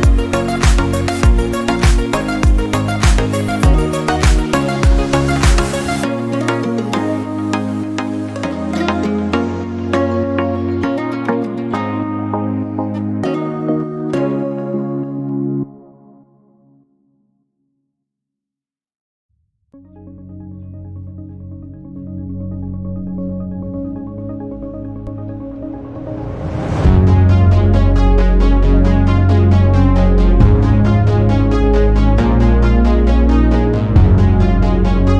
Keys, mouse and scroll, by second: 0.2 shift+click, 1.1 click, 1.6 click, 1.9 shift+click, 2.2 shift+click, 2.5 middle click, 2.9-3.4 scroll up 1, 3.4-4.0 scroll down 1, 4.0 click, 4.3 middle click, 4.7-5.0 scroll down 1, 5.0 Tab, 6.2 ctrl+a, 6.9-7.7 scroll up 2, 7.2 Tab, 7.7 scroll down 1, 7.8 middle click, 8.5 scroll up 1, 8.8-9.8 middle drag, 9.8 shift+click, 10.1 shift+click, 10.4 shift+click, 10.8 middle click, 11.7 shift+click, 11.9 shift+click, 12.2 shift+click, 12.6-14.7 middle drag, 14.7 shift+click, 15.0 shift+click, 15.3 shift+click, 15.7-17.3 shift+middle drag, 17.3 shift+click, 17.6 shift+click, 18.4 shift+click, 18.9 shift+click, 19.2 shift+click, 19.6 middle click, 20.1 scroll down 1, 20.3 middle click, 20.8-21.2 scroll up 1, 21.2 shift+middle click, 21.5-22.2 scroll up 2, 22.2 shift+click, 22.4 shift+click, 22.8 shift+click, 23.3 shift+click, 23.7-24.3 scroll down 1, 24.3 shift+middle click, 24.9-25.4 scroll up 1, 25.4-26.4 middle drag, 26.4-27.2 scroll up 2, 27.3 shift+click, 27.6 shift+click, 27.9 shift+click, 28.2-29.1 scroll down 4, 28.4 middle click, 29.1 middle click, 29.4-30.5 scroll up 1, 30.5 middle click, 31.0-31.7 scroll up 1, 31.7 shift+click, 31.9 shift+click, 32.2 shift+click, 32.8-34.6 middle drag, 34.7 shift+click, 35.0 shift+click.